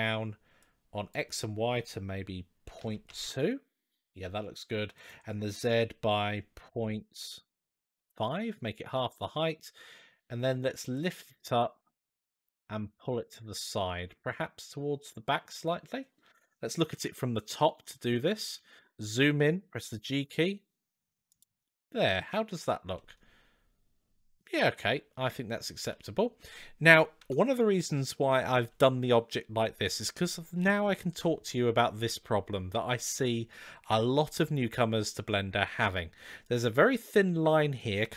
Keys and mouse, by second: 0.4-4.1 drag, 4.8-8.8 drag, 10.7-12.3 drag, 13.2-13.9 middle drag, 15.4-16.1 middle drag, 16.7 KP_7, 18.7-19.0 shift+middle drag, 19.6 g, 21.5-22.0 middle drag, 22.8-25.5 middle drag, 25.7-26.2 middle drag, 36.3 click.